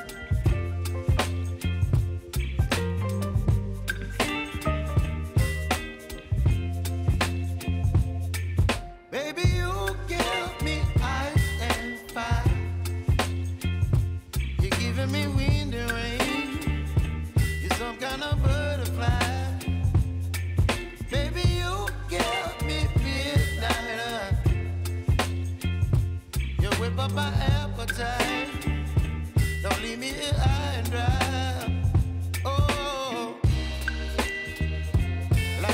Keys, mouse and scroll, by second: 6.0 ctrl+d, 6.5-8.4 drag, 9.7-10.1 alt+scroll up 1, 10.6 s, 11.4 click, 16.7 Down, 17.3-20.3 drag, 23.0 u, 24.3 click, 29.9 click, 31.7-32.3 alt+scroll up 1, 32.9 click, 35.1 space, 35.3 click, 35.6 space.